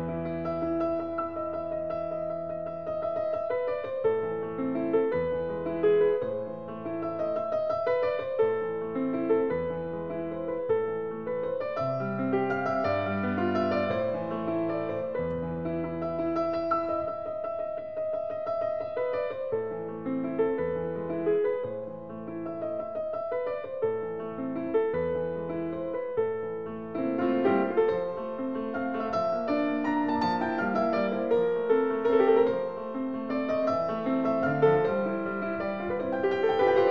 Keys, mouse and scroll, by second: 1.2 click, 2.4 click, 3.5 click, 4.9 Escape, 7.8 s, 9.3 click, 10.0 click, 10.9 click, 12.4 typing, 12.8 Return, 14.0 Escape, 15.2 click, 17.1 click, 18.0 click, 18.6 Escape, 19.1 s, 19.8 click, 20.8 click, 22.8 click, 23.0 Escape, 23.8 s, 24.1 click, 25.3 click, 26.4 click, 26.6 Escape, 27.4 s, 28.0 click, 29.6 click, 30.4 click, 30.8 Escape, 31.7 click, 32.9 click, 33.5 t, 34.6 click, 35.9 click, 36.7 t.